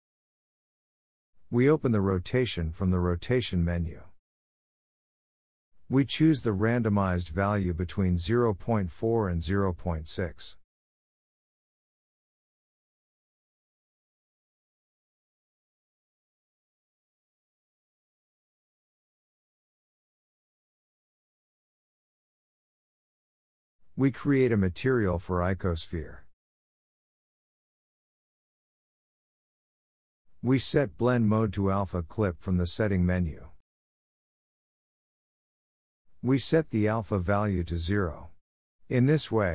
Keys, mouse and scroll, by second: 2.4-6.7 drag, 6.8-11.9 drag, 13.7 click, 14.1-15.0 scroll down 5, 15.0 click, 16.4 g, 17.7 click, 18.0 scroll down 1, 18.1-19.0 middle drag, 19.0-19.6 scroll up 2, 19.6-19.9 shift+middle drag, 19.9-20.5 scroll up 1, 20.5 click, 22.4 click, 23.2 click, 23.9-27.0 drag, 28.5-29.9 scroll down 4, 29.9-31.2 scroll down 13, 31.2-34.3 drag, 35.9-39.5 drag.